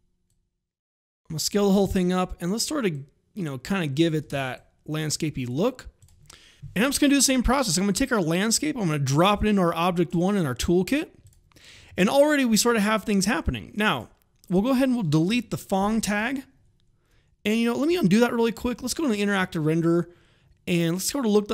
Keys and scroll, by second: 4.1 space, 15.2 Delete, 17.8 ctrl+z, 18.6 alt+r.